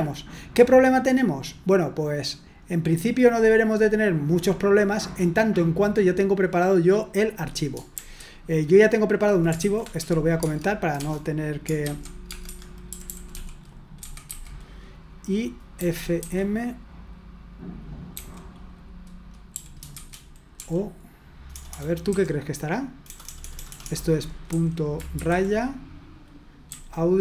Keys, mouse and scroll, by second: 0.1-0.6 scroll down 1, 0.6-1.1 scroll up 1, 1.1-1.7 scroll down 1, 1.7-2.7 scroll down 1, 2.7-3.4 scroll up 1, 7.9 shift+g, 9.4-14.3 typing, 12.4 Escape, 15.7-16.2 typing, 18.1 typing, 19.5-25.1 typing, 26.6 a.